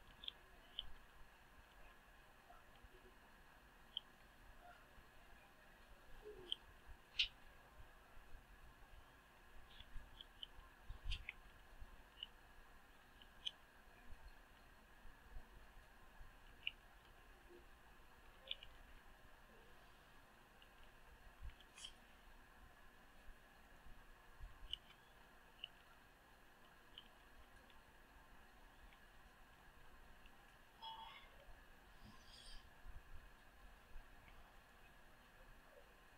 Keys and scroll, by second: 13.8 Return, 18.8 Return, 27.2 Return.